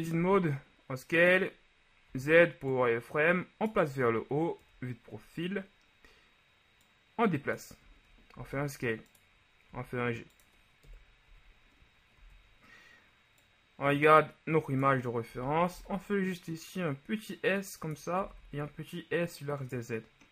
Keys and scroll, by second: 0.3 s, 2.2 z, 4.9 KP_3, 8.5 shift+s, 9.8 g, 11.0 KP_1, 11.4 z, 12.3 z, 15.5 s, 15.9 x, 18.4 s, 18.5 z.